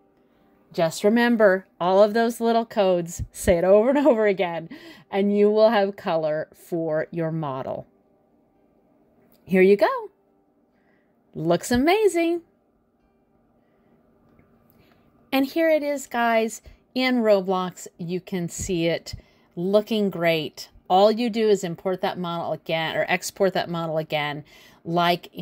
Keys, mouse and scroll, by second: 9.3 click, 10.1 click, 11.2 click, 12.3-13.2 scroll up 2, 13.2 click, 13.8 middle click.